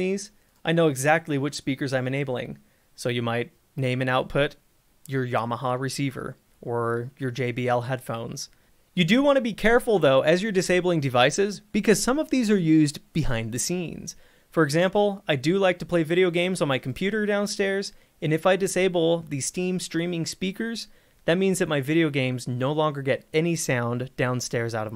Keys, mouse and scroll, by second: 0.6 click, 2.4 click, 8.7 click, 14.6-17.0 scroll, 17.0 click, 21.9 click.